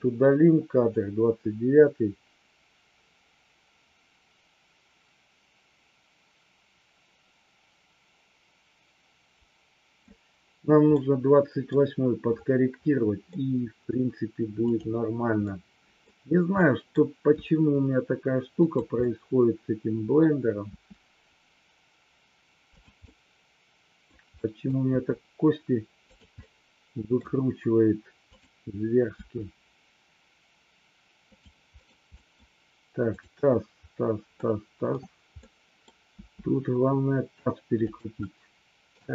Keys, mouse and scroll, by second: 0.9-10.0 drag, 10.9-11.7 middle drag, 13.3 middle click, 14.7-15.4 drag, 15.5-15.9 middle drag, 16.5-16.9 middle drag, 17.4 r, 19.0-20.2 middle drag, 20.7 r, 23.0-24.2 middle drag, 24.3-24.7 middle drag, 24.8 r, 26.4-27.2 middle drag, 28.2 click, 29.0 r, 31.8 middle click, 32.2 middle click, 34.3-34.9 middle drag, 35.4 middle click, 36.2 r, 37.8 click, 38.3 middle click.